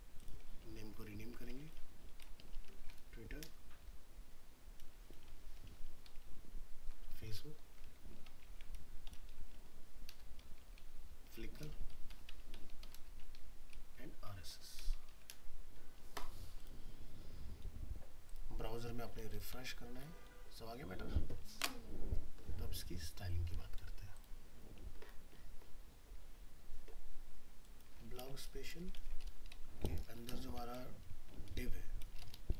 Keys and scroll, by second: 5.3 alt+F4, 28.2 ctrl+c, 29.0 ctrl+v.